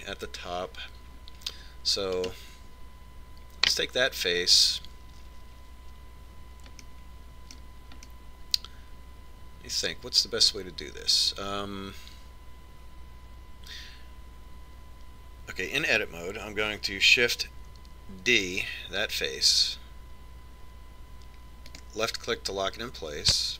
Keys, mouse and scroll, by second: 3.6 right click, 8.2-11.2 middle drag, 19.8 shift+d.